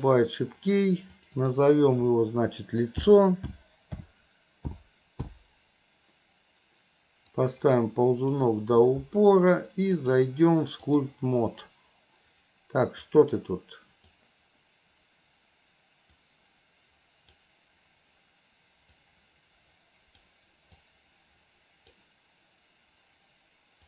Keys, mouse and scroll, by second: 0.0 click, 1.2-5.4 drag, 7.5 click, 10.0-11.2 drag, 13.2-14.3 drag, 16.2-17.4 drag, 19.0-20.2 drag, 20.9-22.0 drag.